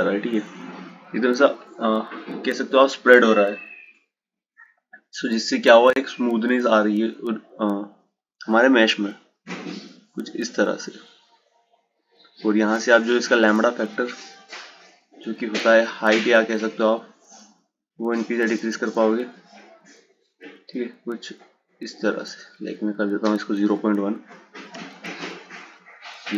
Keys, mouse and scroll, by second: 6.1 click, 8.2-11.3 drag, 12.6-15.8 drag, 23.1-26.1 drag.